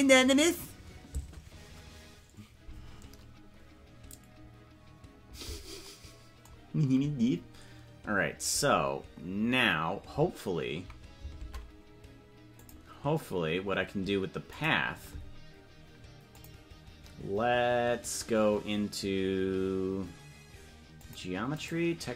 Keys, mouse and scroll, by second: 12.5 click, 14.4 click, 16.3 click, 20.9 click, 21.5 click.